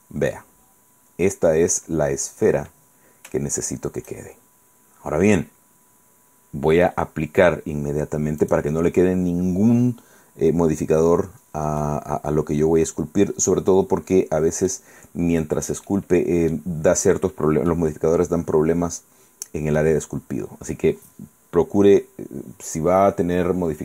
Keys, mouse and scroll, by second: 0.1-1.8 middle drag, 2.0-2.6 scroll up 2, 4.9 scroll down 2, 8.5 click, 11.9-15.0 middle drag, 15.1-15.7 scroll up 2, 16.0 middle click, 16.7 scroll up 1, 16.9 scroll down 1, 17.4 scroll down 1, 17.8-20.1 middle drag.